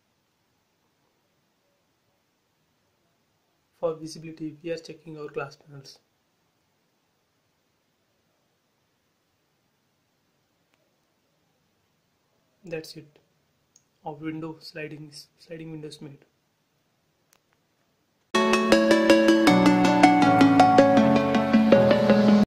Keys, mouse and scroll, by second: 0.5 scroll down 1, 1.6 scroll down 1, 2.1 click, 2.5 middle click, 3.3 m, 3.6 click, 6.7-9.7 middle drag, 9.7 click, 10.0 space, 10.2 middle click, 11.3 middle click, 12.0 scroll down 1, 12.4 click, 12.7 scroll up 1, 14.2-17.7 middle drag.